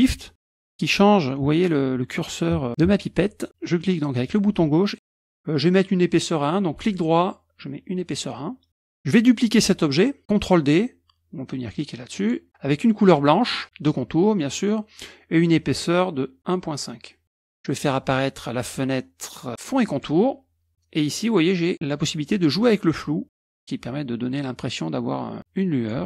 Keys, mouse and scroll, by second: 3.5 shift+click, 6.8 right click, 8.0 middle click, 14.4 middle click, 15.8 right click, 17.3 click, 19.9 click, 22.7-26.0 drag.